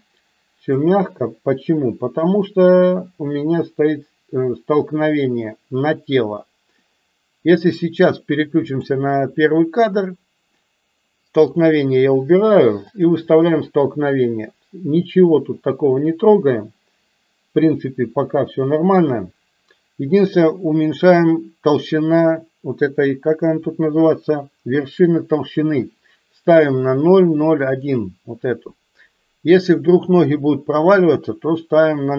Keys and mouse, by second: 0.7 click, 8.8 click, 27.8-32.1 drag.